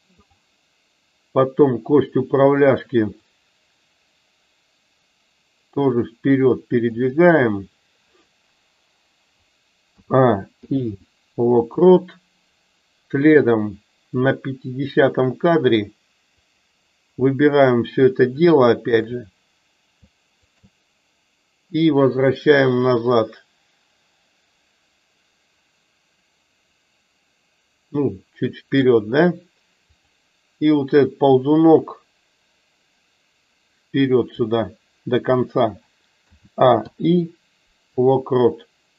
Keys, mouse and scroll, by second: 0.2 click, 3.4-6.9 drag, 14.0 click, 16.3 click, 18.4-19.0 shift+drag, 22.0-28.9 drag, 31.4-34.3 drag.